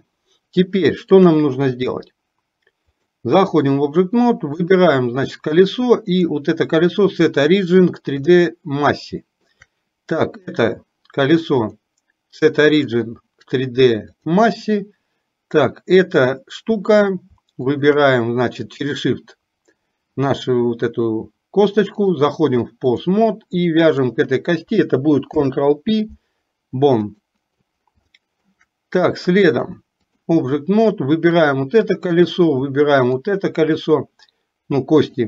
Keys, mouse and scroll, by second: 0.7 shift+middle click, 3.1 click, 6.2-8.6 drag, 9.1-9.6 shift+middle drag, 11.7-14.5 drag, 15.7 click, 17.7 shift+click, 22.2-23.2 drag, 24.1 click, 28.2 middle click, 29.6 click, 31.5 click, 33.2 shift+click, 35.1-35.2 drag.